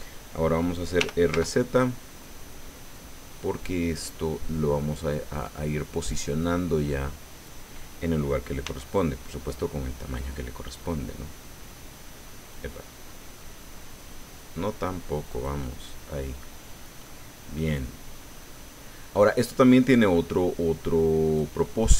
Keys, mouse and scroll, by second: 1.0 r, 1.3 z, 3.9 click, 5.3-7.6 drag, 8.6 s, 15.3 click, 15.6-16.6 middle drag, 16.6 scroll up 1, 17.0 click, 18.5 middle click, 19.6-21.6 drag, 21.6 middle click.